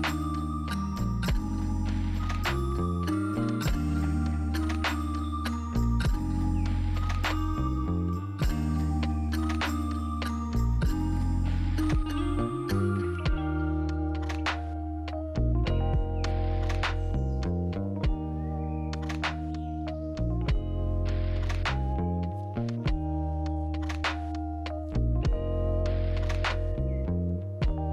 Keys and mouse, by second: 0.7 z, 0.8 z, 0.8 z, 1.1-1.7 middle drag, 2.1 g, 2.9 y, 2.9 y, 3.5 r, 5.8 shift+middle drag, 6.4 g, 8.0 z, 8.1 z, 8.1 z, 8.2 z, 9.2 click, 13.4 ctrl+alt+b, 16.7 click, 21.3 click, 22.3 Delete, 27.5 click.